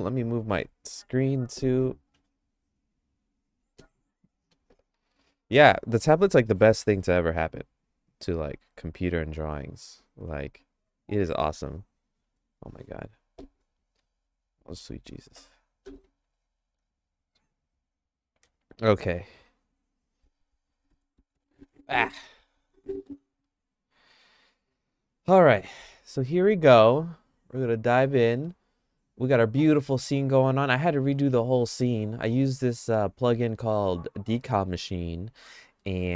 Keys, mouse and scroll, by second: 28.2 middle click, 28.5-30.9 shift+middle drag, 31.9 middle click, 32.5 shift+middle click, 34.5 middle click, 35.8 middle click.